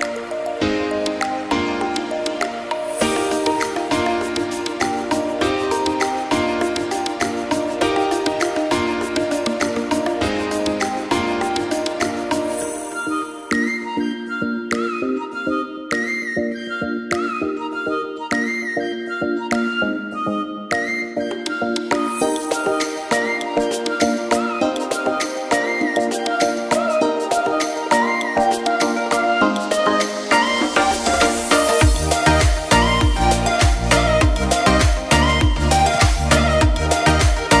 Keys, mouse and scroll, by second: 0.4 click, 0.5 click, 0.7 s, 1.2 click, 1.8 click, 2.1 shift+d, 2.8 g, 3.4 click, 9.2 click, 9.5 s, 10.2 shift+d, 10.9 click, 23.4 scroll down 11, 23.9 click, 24.7 click, 25.0 g, 25.5 r, 26.8 click, 27.1 shift+middle click, 27.8 click, 28.0 shift+middle click, 28.1 scroll up 3, 28.3 shift+middle click, 29.0 r, 31.0 click, 31.2 shift+middle click, 32.0 g, 33.4 click, 33.6 scroll down 4, 33.8-34.1 scroll up 1, 34.1 r, 35.1 g, 36.5 r, 37.4 g.